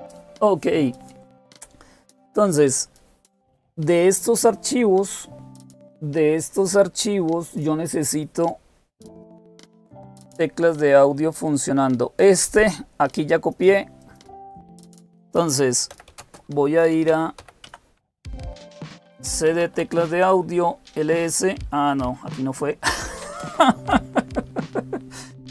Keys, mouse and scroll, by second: 11.0-14.7 drag, 15.5-19.8 typing, 22.7-23.6 typing.